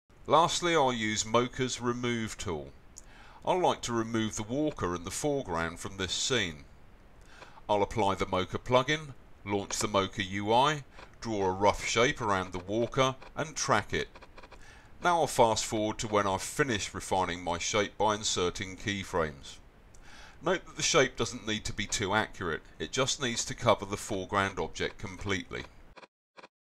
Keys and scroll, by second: 15.3 c.